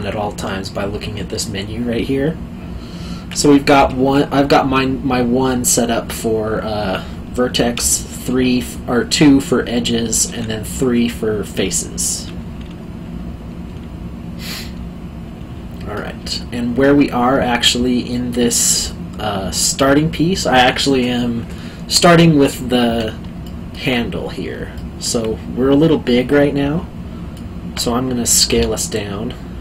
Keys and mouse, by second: 3.7 1, 7.7 2, 10.2 KP_3, 12.0 middle click, 15.6 alt+middle click, 23.4 alt+middle click, 24.7 alt+middle click, 28.5 s.